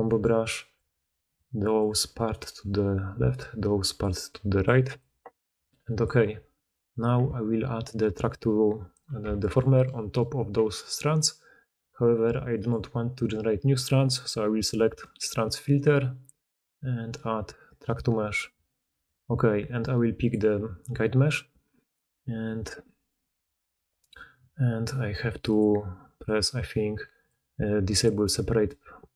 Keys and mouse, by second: 0.4-6.0 drag, 6.7-9.3 drag, 6.7 middle click, 6.7 right click, 9.7-20.3 shift+drag, 20.3-22.3 middle drag.